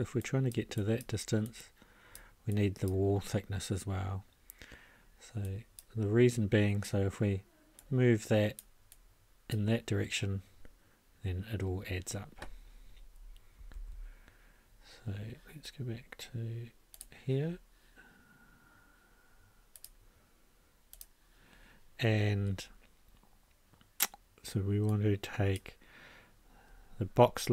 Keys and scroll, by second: 13.7 ctrl+a.